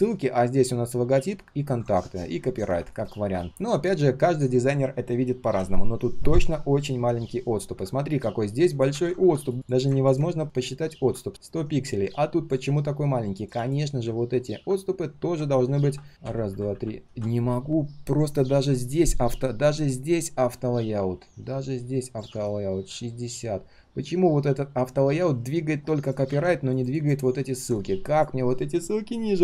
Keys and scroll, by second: 8.9 ctrl+z, 26.3 ctrl+z.